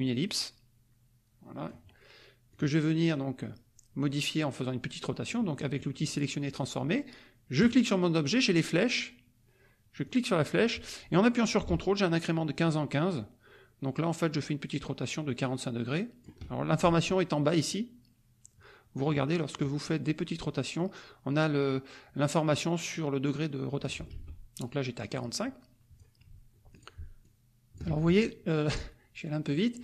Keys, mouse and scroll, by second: 2.5 click, 7.6 click, 10.0-16.4 drag, 20.3-24.0 drag, 24.1 ctrl+z, 25.0-26.1 drag, 26.7 ctrl+click, 27.2 ctrl+click, 27.8 ctrl+z, 28.6 click, 29.5 click.